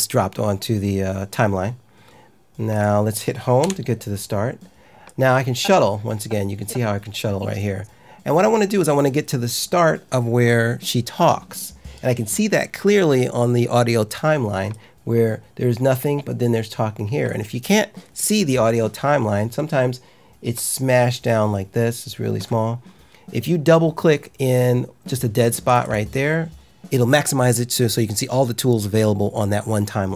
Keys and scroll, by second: 3.6 Home.